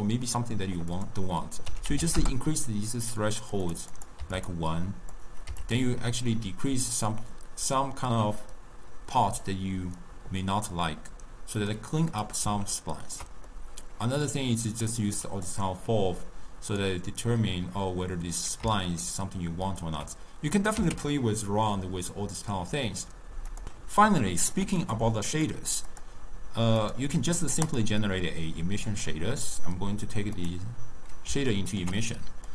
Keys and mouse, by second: 1.1-4.7 drag, 5.3 click, 11.7 click, 12.3 click, 12.9-14.4 ctrl+middle drag, 14.4 click, 15.6-18.7 drag, 19.0-20.7 ctrl+middle drag, 20.7 click, 21.5 x, 24.1-24.8 ctrl+middle drag, 24.8 click, 25.3 click, 25.9 click, 26.8 click, 27.7-31.6 drag, 31.6-32.5 ctrl+middle drag.